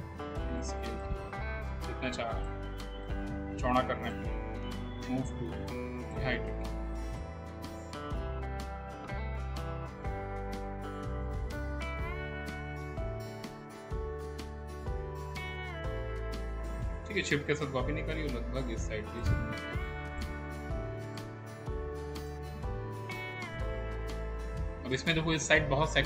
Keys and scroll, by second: 5.2 w, 8.4 e, 9.6 w, 10.6 r, 15.1 w.